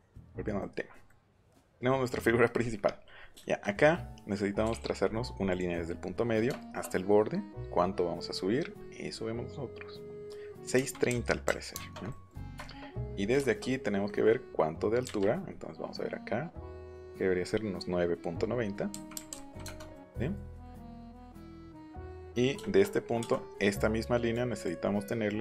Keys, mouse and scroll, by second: 0.1 click, 0.4 middle click, 1.0 middle click, 1.4 middle click, 3.4 shift+middle click, 3.7 middle click, 4.2 middle click, 4.6 l, 5.5 click, 6.0 click, 10.7 KP_6, 11.0 KP_Decimal, 11.4 KP_3, 11.7 KP_Enter, 12.0 middle click, 12.1 scroll up 1, 15.0 Up, 18.9 KP_9, 19.1 KP_Decimal, 19.3 KP_9, 19.6 KP_Enter, 19.9 middle click, 20.6 middle click, 21.1 shift+middle click, 24.3 click.